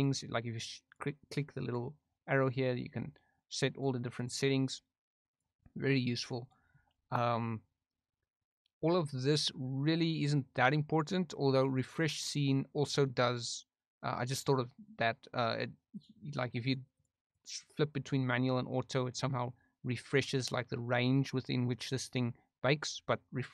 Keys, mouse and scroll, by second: 0.8 click, 1.6 click, 2.3 click, 3.7 click, 4.1 click, 5.2 click, 6.4 drag, 13.1 click, 15.9 drag, 16.2 click, 16.6 drag, 16.9 drag, 17.2 click.